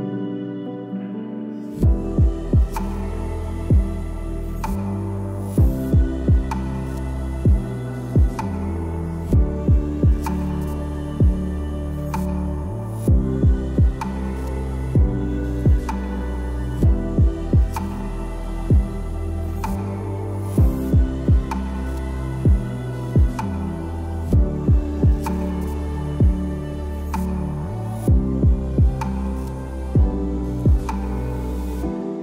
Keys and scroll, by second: 1.0 b, 1.5 z, 2.3 space, 13.3 space, 14.5 space, 23.0 p, 23.2 l, 23.5 space, 26.7 a, 26.9 space.